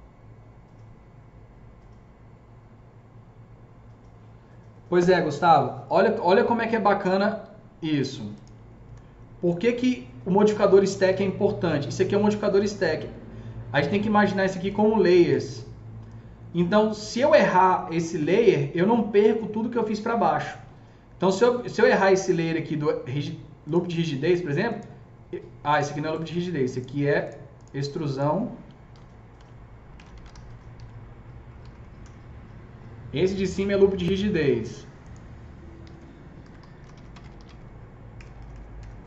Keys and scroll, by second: 8.8 F3, 29.3-32.4 typing, 36.0-38.9 typing.